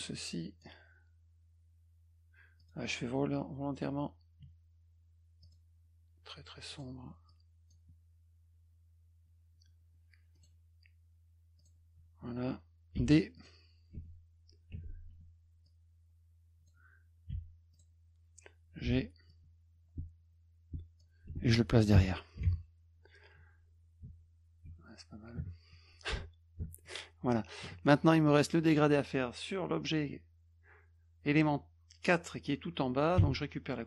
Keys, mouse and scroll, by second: 0.0 click, 2.6 click, 5.4 click, 6.7 click, 7.3 click, 10.3 click, 11.6 click, 13.0 d, 13.4 click, 14.0 F1, 15.7-16.7 drag, 17.3 d, 17.7 click, 18.9 g, 19.3-21.0 drag, 24.0 F2, 26.8 click, 28.3 middle click, 33.2 d.